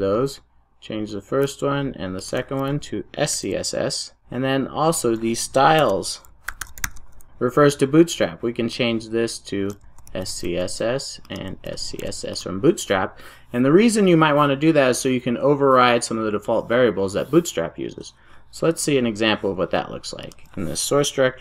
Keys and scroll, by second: 3.3 super+s, 5.9 ctrl+shift+super+o, 11.9 super+s, 12.3 super+s.